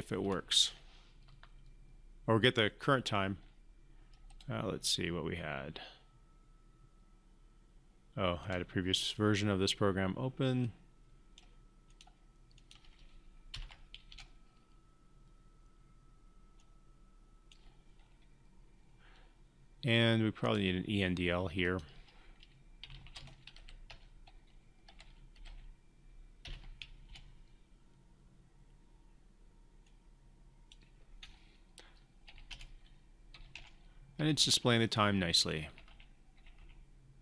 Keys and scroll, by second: 13.4 ctrl+F5, 26.3 ctrl+F5.